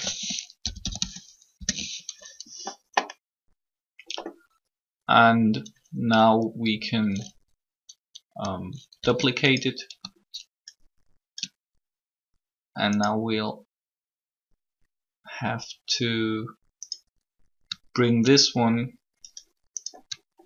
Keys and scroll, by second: 1.1-1.9 typing, 8.7 shift+d.